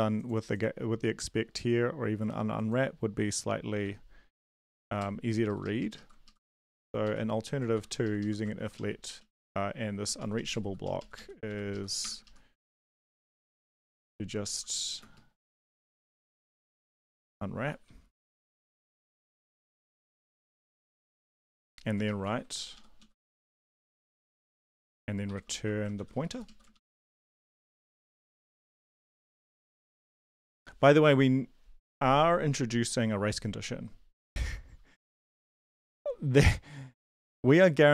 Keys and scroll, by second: 5.4 ctrl+Left, 5.6 ctrl+Left, 5.8 ctrl+Left, 6.2 ctrl+Left, 7.0 Right, 7.7 shift+End, 8.0 shift+Left, 8.2 shift+Left, 8.5 ctrl+x, 8.7 Up, 9.1 Down, 10.0 Down, 10.2 Down, 10.3 Down, 10.8 Up, 11.1 Up, 11.7 Left, 12.0 BackSpace, 12.2 ctrl+Left, 12.6 ctrl+Left, 12.9 ctrl+Right, 13.6 ctrl+shift+Left, 13.7 ctrl+shift+Left, 13.9 ctrl+shift+Left, 14.2-19.2 typing, 15.4 Right, 19.7 Down, 19.9 Down, 20.1 Down, 20.4 shift+Up, 20.4-21.9 typing, 20.5 shift+Up, 22.2 ctrl+v, 22.7 Up, 23.0 Down, 23.2 shift+Up, 23.4 shift+Up, 23.7 shift+Left, 23.9 shift+Tab, 24.2 Down, 24.5 Up, 24.7 Down, 24.9 Down, 25.2 End, 25.5 shift+Home, 25.9 ctrl+x, 26.1 Down, 26.3 Down, 26.4 Down, 26.7 shift+Up, 27.0 shift+Up, 27.7 Tab, 28.5 BackSpace, 28.9 Down, 29.1 Delete, 29.3 Tab, 29.5 Return, 29.8 ctrl+v, 30.1 Down, 30.4 BackSpace, 30.6 ctrl+s.